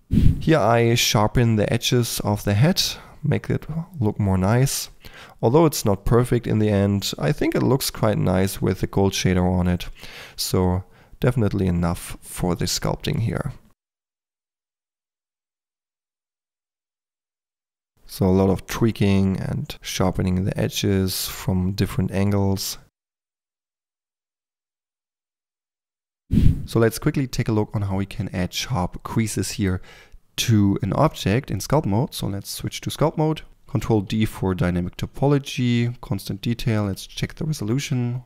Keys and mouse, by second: 0.3 Tab, 0.4 f, 1.2 ctrl+click, 1.9 click, 1.9 f, 2.2 f, 2.7 f, 3.8 click, 4.0 f, 4.1 f, 4.6 click, 5.5 f, 5.6 click, 6.0 click, 6.6 f, 6.7 click, 7.3 click, 7.3 f, 7.9 click, 7.9 f, 8.1 3, 8.4-9.7 drag, 9.9-11.6 drag, 10.9 f, 11.7 click, 12.1 click, 12.4-13.9 typing, 12.9 drag, 13.2 click, 13.4 click, 15.4-17.9 typing, 16.0 click, 17.1 drag, 17.4 click, 17.6 click, 18.1 click, 18.6 click, 19.0-21.7 typing, 19.7 click, 21.0 click, 21.7 click, 22.0 drag, 22.2 click, 22.7-23.7 typing, 23.0 drag, 23.9 click, 24.7-25.8 typing, 24.9 drag, 31.7 Tab, 33.5 ctrl+d, 33.9 ctrl+d, 37.5-38.2 drag.